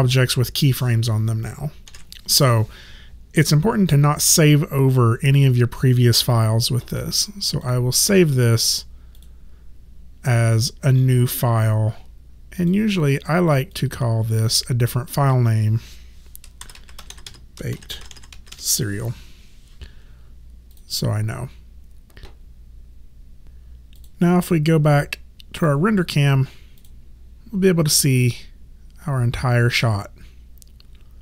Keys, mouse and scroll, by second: 1.9 ctrl+z, 7.7 click, 12.6 click, 16.4-19.0 typing, 20.7 click, 24.0 click.